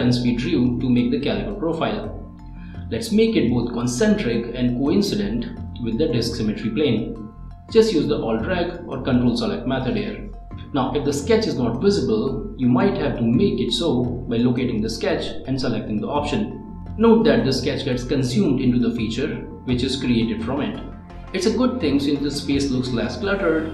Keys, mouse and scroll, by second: 2.5 ctrl+click, 4.3 click, 6.9-7.5 scroll down 1, 7.6 click, 7.6 click, 9.3 click, 10.2 click, 10.5 middle click, 12.6 click, 13.4 click, 14.1 middle click, 16.8 click, 17.8-18.5 ctrl+scroll down 1, 18.5 ctrl+click, 19.8 click, 21.0 scroll up 1, 21.5 middle click, 23.1-23.6 scroll down 1.